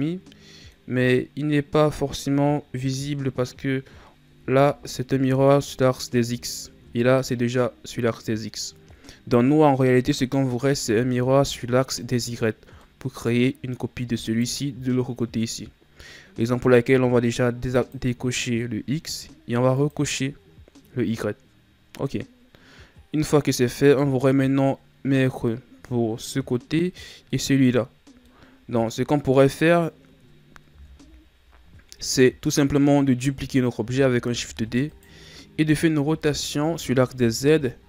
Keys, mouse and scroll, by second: 1.4-1.8 scroll down 2, 3.2-4.3 scroll down 2, 4.3 KP_1, 5.3-6.4 scroll up 7, 6.4-7.0 shift+scroll up 5, 7.0-10.1 scroll down 2, 10.8 KP_3, 12.8-14.2 middle drag, 14.2 right click, 17.6 click, 19.7 click, 22.0-25.0 middle drag, 26.8-30.7 middle drag, 30.7 KP_1, 34.2 shift+d, 36.2 r.